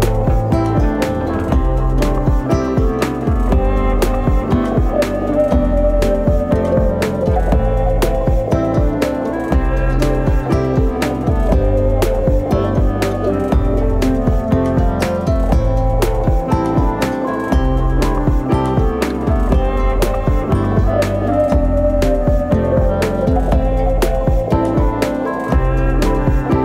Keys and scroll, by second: 9.0 F10, 21.6 typing, 24.2-26.1 typing.